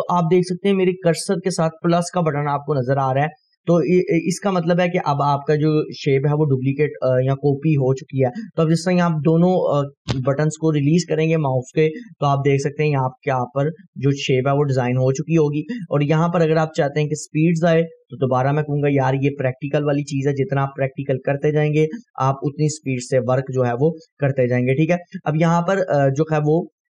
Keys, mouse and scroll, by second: 13.7-15.2 drag, 14.9 right click, 16.0 right click, 16.4-17.3 click, 17.0 right click, 17.7 scroll down 1, 19.2 scroll up 1, 20.3-21.8 click, 21.5 right click, 22.1-23.2 click, 22.9 right click, 23.2-24.3 click, 23.9 right click, 24.4-25.1 click, 24.8 right click, 25.3 scroll down 1, 26.3-26.9 drag.